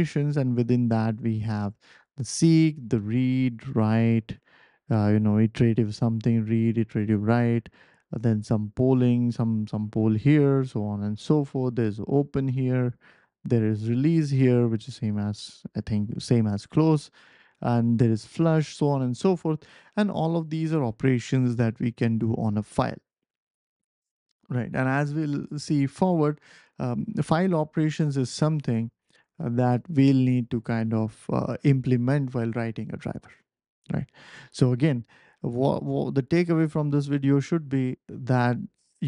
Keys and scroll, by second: 26.0 ctrl+alt+super+p, 29.0 ctrl+alt+super+p, 29.9 BackSpace, 30.3 ctrl+alt+super+p.